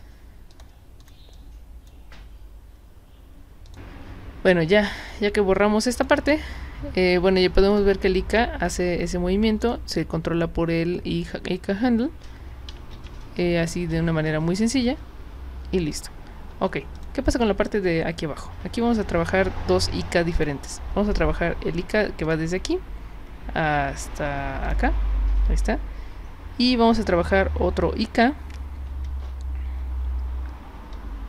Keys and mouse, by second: 0.5 click, 1.0 click, 1.3-1.9 drag, 3.7 click, 5.1-6.0 drag, 7.7 click, 9.6 click, 12.9 w, 13.9-15.9 drag, 16.5 z, 16.9 click, 20.4 click, 22.2 click, 24.6 click.